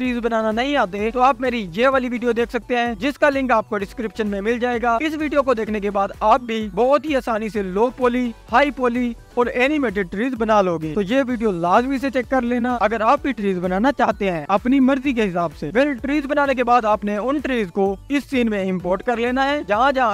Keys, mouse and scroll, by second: 0.4 click, 0.9 click, 1.3-1.7 scroll up 13, 1.7 click, 1.7 click, 2.1 click, 2.5-3.8 scroll down 15, 2.9 click, 2.9 click, 3.8-4.3 scroll up 3, 4.3 click, 5.0 alt+d, 5.2 click, 5.5 s, 6.4-6.7 drag, 7.2 s, 7.6 click, 7.9 click, 8.6 click, 9.6 s, 10.4 z, 10.4 z, 11.1 click, 11.8 scroll down 3, 12.4 click, 12.9 alt+d, 13.0 scroll down 2, 13.7 click, 14.1 scroll down 2, 14.3 click, 14.5 scroll up 3, 15.4 click, 15.7 s, 16.2 scroll up 5, 16.5 scroll down 2, 16.7 click, 17.4 scroll up 1, 18.2 click, 19.4 s, 19.8 y.